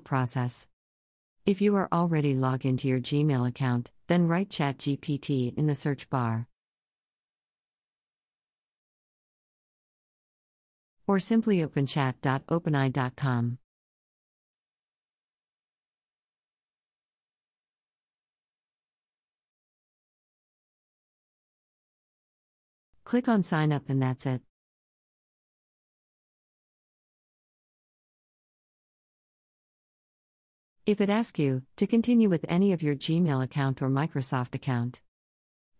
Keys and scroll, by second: 2.7 Return, 9.7 Down.